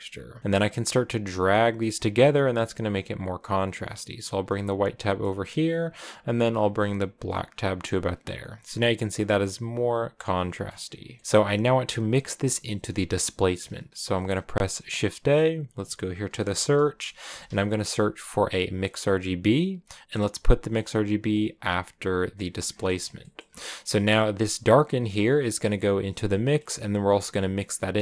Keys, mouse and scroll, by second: 4.8-6.5 middle drag, 6.5-7.7 drag, 7.7 scroll down 1, 7.7-11.0 middle drag, 11.0 scroll down 4, 11.6-19.2 drag, 21.8 click, 24.4-28.0 drag.